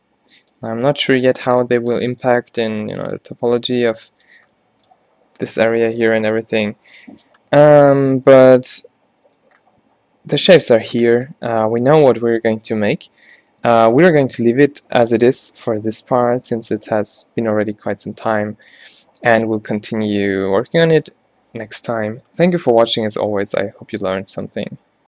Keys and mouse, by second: 1.0 Tab, 1.5 Tab, 8.1 a, 8.3 a, 15.9-17.0 drag, 17.0-19.5 middle drag, 23.5-25.1 middle drag.